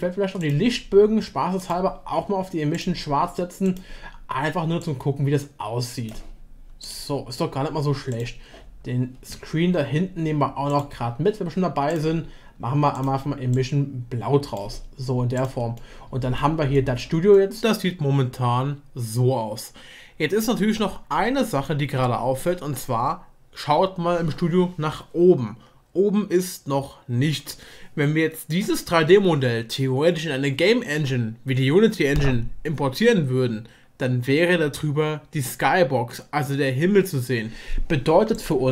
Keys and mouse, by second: 1.7-2.8 drag, 3.6 click, 8.1 click, 10.7-12.0 drag, 15.8-16.4 middle drag, 16.7 middle click, 17.3-17.6 shift+middle drag, 17.8 middle click, 18.5-19.0 shift+middle drag, 19.8 click, 26.3 middle click.